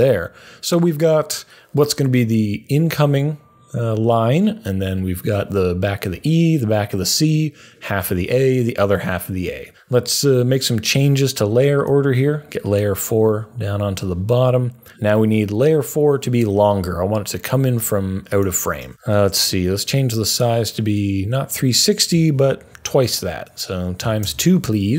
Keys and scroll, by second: 19.0 u, 21.2 Right, 22.1 Right, 24.0 Right.